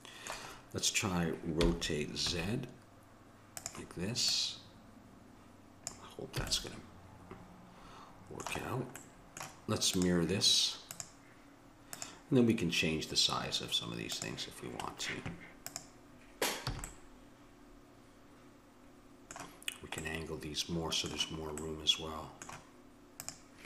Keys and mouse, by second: 1.6 r, 4.3-6.3 drag, 6.4 a, 9.9-12.8 drag, 14.2-16.1 drag, 16.7 a, 16.9-18.6 middle drag, 20.1-23.2 middle drag, 23.2 click.